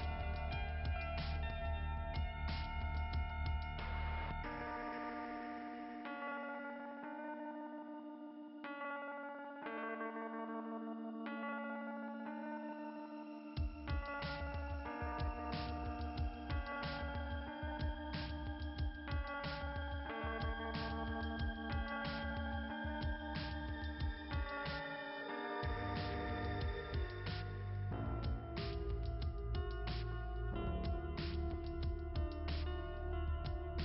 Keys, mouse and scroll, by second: 4.0 scroll up 2, 7.6 click, 15.1 click, 18.9 right click, 21.3 click, 28.1 click, 30.9 right click, 33.3 click, 33.6 click.